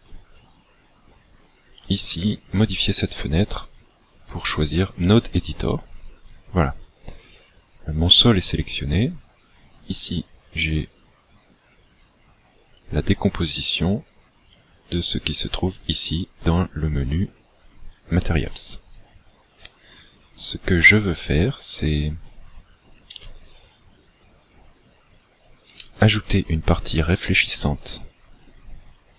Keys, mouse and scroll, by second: 1.8 click.